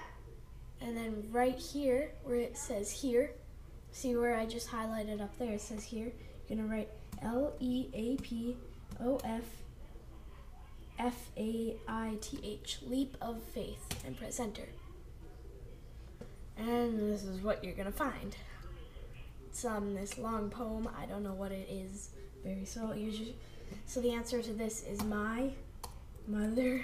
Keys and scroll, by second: 13.9 Return.